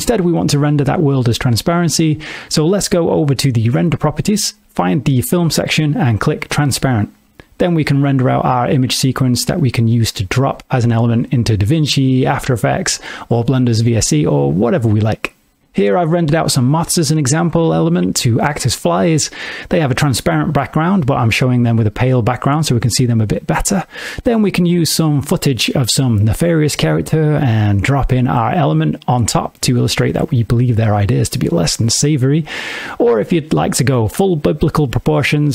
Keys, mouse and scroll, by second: 1.4 click, 2.8 middle click, 5.1 click, 5.7 middle click, 7.1 click, 9.7 F12.